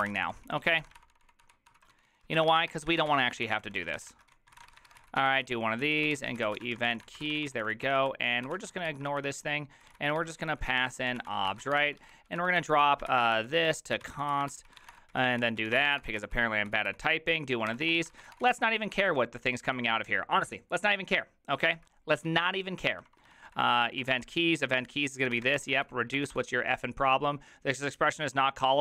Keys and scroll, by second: 0.0-19.1 typing, 21.5-24.1 typing, 25.2-26.8 typing, 28.3-28.8 typing.